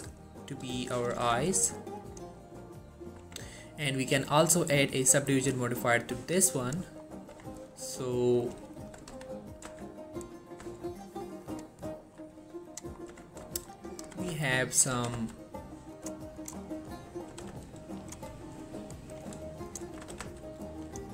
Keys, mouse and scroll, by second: 0.6-1.1 scroll up 1, 1.1 click, 1.2 g, 1.5 g, 2.1 click, 2.5-3.3 scroll down 1, 3.3 Tab, 4.4 click, 7.1-7.5 scroll up 1, 7.5 Tab, 8.5 click, 8.9 alt+shift+click, 9.3 x, 9.8 z, 10.5 scroll down 1, 10.7 Tab, 11.2-11.6 scroll down 1, 11.6 click, 12.0 scroll up 1, 12.8 click, 13.0 scroll up 1, 13.2 Tab, 13.7 shift+middle click, 14.0 click, 14.1 g, 14.5 x, 14.9 right click, 15.1 g, 15.2 g, 16.0 click, 16.7 scroll down 1, 16.7 middle click, 17.4 g, 17.6 g, 18.1 click, 18.4 scroll down 1, 18.5 middle click, 19.2 click, 19.8 shift+click, 20.2 s, 20.3 z, 21.0 click.